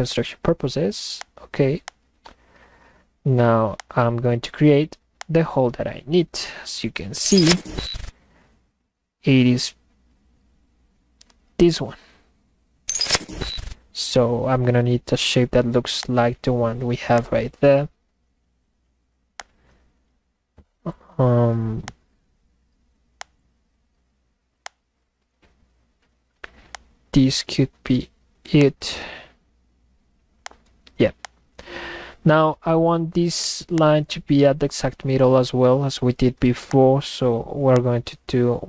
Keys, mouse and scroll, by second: 1.2 click, 1.9 click, 3.8 click, 5.2 click, 16.0 click, 17.2 click, 19.4 click, 21.8 click, 23.2 click, 24.6 click, 26.7 click, 28.6 click, 30.4 click, 31.2 click, 33.8-36.4 drag, 36.7 click, 37.8 click.